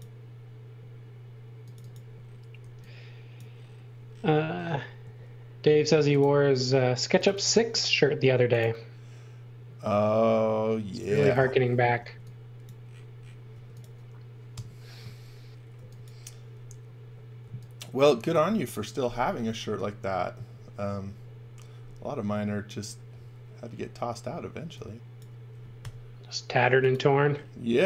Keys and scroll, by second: 2.6 e, 5.0 a, 11.9 e, 13.5 space, 14.5 Delete, 15.7 x, 17.4 x, 24.6 x, 25.7 i.